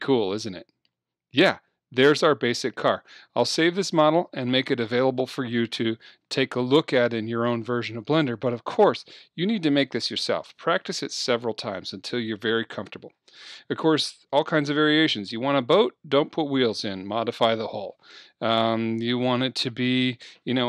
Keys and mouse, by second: 3.7-8.4 middle drag, 8.4-10.1 drag, 10.2-14.3 drag.